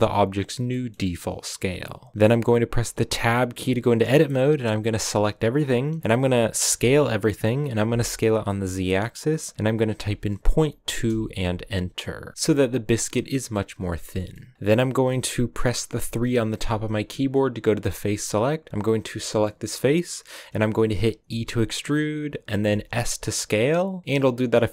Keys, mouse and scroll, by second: 0.6-3.0 middle drag, 3.0 Tab, 3.8-4.3 scroll up 1, 4.3 a, 4.5 a, 4.8-6.6 scroll up 2, 6.6 s, 11.9-16.6 middle drag, 16.6 3, 17.2-17.5 scroll up 1, 17.7 scroll up 1, 18.8 right click, 19.1-20.4 middle drag, 20.4-21.1 scroll up 2, 21.2 e, 22.6 s, 24.0 middle click.